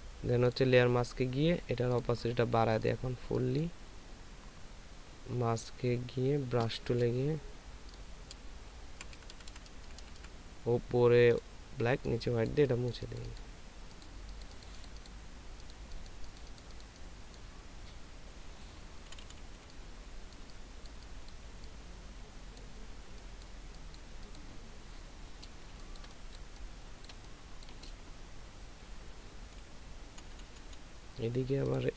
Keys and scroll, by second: 9.1-10.2 typing, 19.5 [, 19.5 [, 26.0 ctrl+space, 29.6 [, 30.3 [, 30.5 [, 30.7 [.